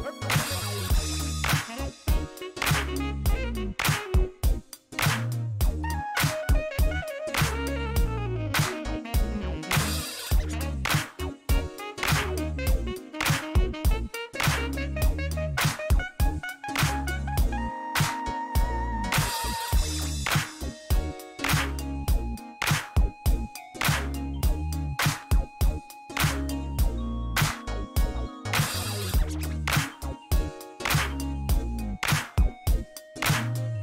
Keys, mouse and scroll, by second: 1.6 middle click, 3.0 click, 3.3 middle click, 5.4 click, 8.3 KP_Subtract, 9.1-10.3 typing, 10.9 Return, 11.8 middle click, 13.2 click, 15.0 click, 15.5 middle click, 16.6 click, 18.6 KP_8, 18.7 ,, 19.0 KP_5, 19.7 KP_Enter, 21.9 click, 22.7 click, 24.2 click, 26.5 click, 27.6 shift+middle click, 28.1 shift+right click, 28.7 shift+middle click, 29.0 shift+right click, 30.9 click, 31.3 click, 32.3 scroll up 1, 32.6 shift+middle click, 32.9 shift+right click.